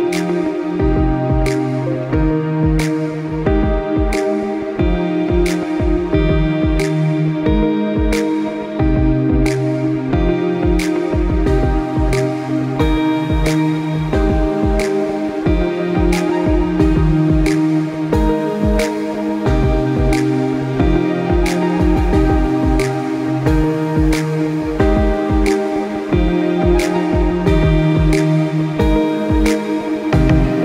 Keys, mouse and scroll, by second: 8.4 click, 18.0-20.5 typing, 21.1 ctrl+click, 21.5 click, 21.8-23.4 typing, 23.9 click, 26.8 click, 27.5 ctrl+a, 27.7 KP_2, 27.8 KP_5, 27.9 KP_Enter, 29.1 click.